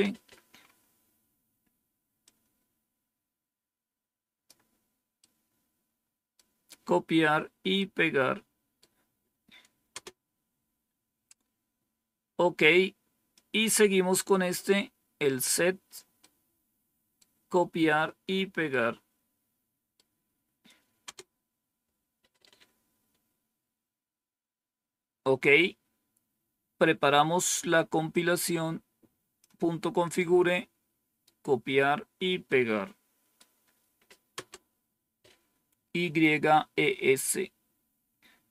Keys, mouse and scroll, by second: 2.1-4.4 drag, 5.1-6.3 right drag, 7.7-8.7 right drag, 9.8 Return, 13.2-15.4 drag, 16.1-17.1 right drag, 18.6-19.9 right drag, 20.9 Return, 23.1-23.8 scroll down 1, 28.0-29.3 drag, 30.1-31.2 right drag, 32.4 right click, 34.2 Return, 37.2-37.8 scroll down 1, 37.8-38.5 scroll down 1.